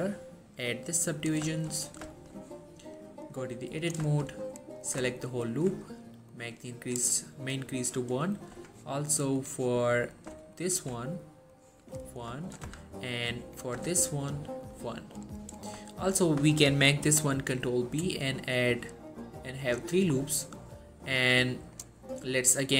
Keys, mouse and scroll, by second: 1.7 shift+middle click, 1.8-2.2 scroll up 1, 2.2 shift+middle click, 3.4 click, 4.2 shift+middle click, 4.4 scroll up 1, 4.9 click, 5.3-7.4 alt+shift+drag, 9.5 click, 10.5 alt+shift+click, 12.8 shift+z, 13.4 click, 13.9 z, 14.8-15.4 click, 16.0 shift+middle click, 17.2 ctrl+b, 17.9-19.0 scroll up 1, 19.0-19.7 scroll down 1, 19.7 click, 20.2-20.9 scroll up 1, 21.4-22.0 click.